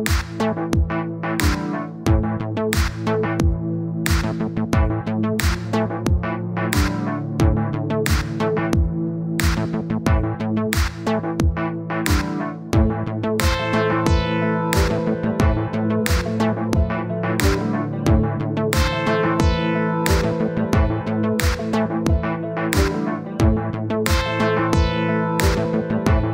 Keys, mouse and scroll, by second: 0.2-1.4 middle drag, 2.0-5.4 drag, 5.4 middle click, 5.9-7.8 drag, 7.8 middle click, 8.3-9.7 drag, 9.7 middle click, 10.1-11.2 drag, 11.2 middle click, 11.5 click, 12.5 middle click, 13.1-16.5 drag, 16.5 middle click, 16.9 click, 17.8 middle click, 18.2-20.7 drag, 20.7 middle click, 20.9 scroll down 1, 21.2-22.3 drag, 22.3 middle click, 22.6 click, 23.5 middle click, 23.8-24.8 drag, 24.8 middle click, 25.2-26.2 drag, 26.2 middle click.